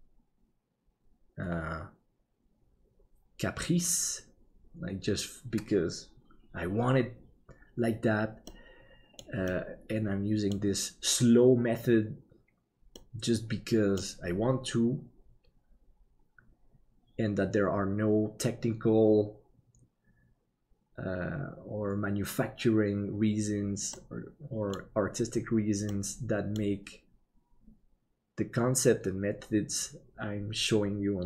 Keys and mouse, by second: 8.6 middle click, 9.6-10.6 middle drag, 13.0-14.1 middle drag, 24.0 middle click, 26.0 middle click.